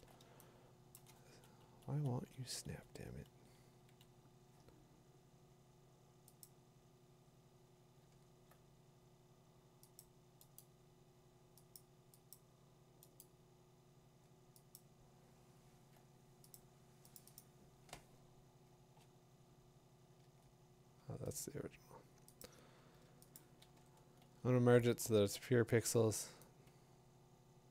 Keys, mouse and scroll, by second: 0.8 scroll, 1.0 click, 1.0 middle click, 1.6 Left, 1.9 Left, 2.3 Left, 2.4 Left, 2.7 Left, 6.4 Up, 6.4 click, 10.0 click, 10.6 right click, 11.8 click, 12.3 click, 13.2 right click, 14.7 click, 16.3 click, 16.5 click, 18.8 click, 20.2 ctrl+w, 21.4 Return, 22.4 click, 23.4 click, 23.7 e, 27.5 middle click.